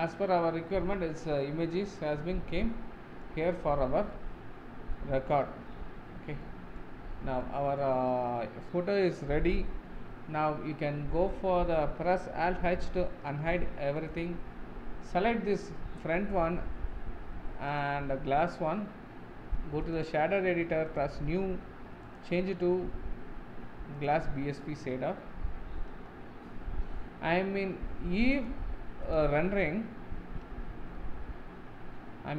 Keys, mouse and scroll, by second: 1.7 middle click, 2.2 Tab, 2.6-3.6 middle drag, 3.6-4.1 scroll up 5, 4.1-6.0 middle drag, 6.0-6.4 scroll down 4, 6.4-7.0 middle drag, 7.0-7.4 scroll down 4, 7.4-8.8 middle drag, 8.8-9.7 scroll up 1, 9.7-11.0 scroll up 1, 11.0-12.0 scroll up 1, 12.0-12.4 scroll up 1, 12.4 alt+h, 13.1-14.1 middle drag, 14.1 click, 14.8-15.1 scroll up 2, 19.9-30.9 drag, 30.9 z.